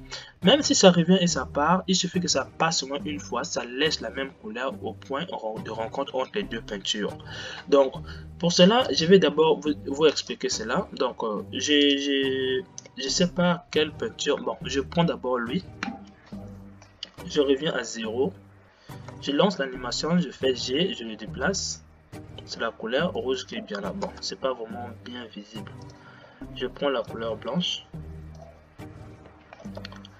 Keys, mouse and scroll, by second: 10.6 click, 17.3 shift+Left, 19.1 space, 19.6 g, 24.3 space, 27.3 click, 29.9 shift+Left.